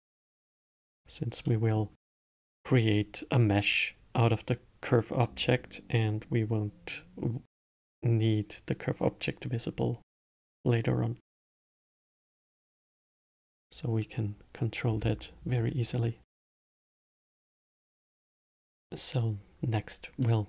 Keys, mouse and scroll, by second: 0.1 click, 0.8 click, 1.8-4.8 middle drag, 12.0-15.1 middle drag, 20.2-20.4 middle drag.